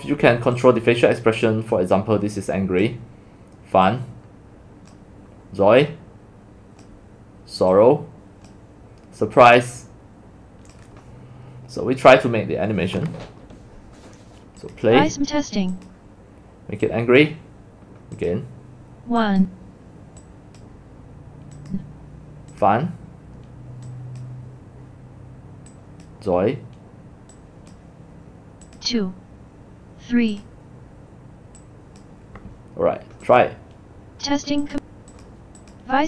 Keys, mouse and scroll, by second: 0.6 click, 2.7 click, 3.9-4.9 drag, 5.8-7.0 drag, 7.7 click, 9.4-10.9 drag, 14.6 click, 15.8 click, 16.9 click, 19.4 click, 20.3 click, 21.6 click, 22.6 click, 23.9 click, 25.8 drag, 27.4 click, 28.8 click, 30.4 click, 31.6-32.0 drag, 33.4-34.2 drag, 34.8 click, 35.4 click.